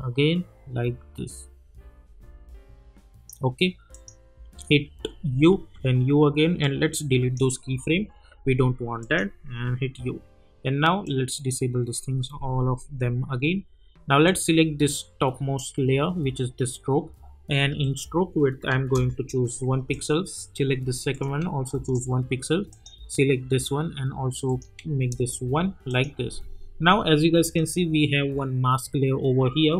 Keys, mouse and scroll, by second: 4.4 u, 5.6 u, 6.6-7.5 click, 9.0 click, 9.5 u, 11.0-11.6 drag, 15.5-17.1 scroll down 1, 17.8 click, 18.9 Return, 19.9 click, 21.7 Return, 22.7 click, 25.1 Return, 25.9 click.